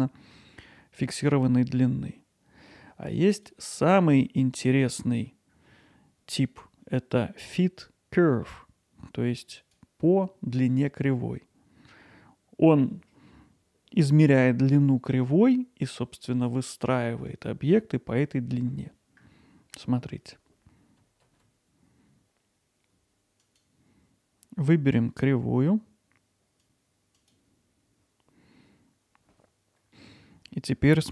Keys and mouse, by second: 3.4-9.8 drag, 23.4 click, 29.1 click.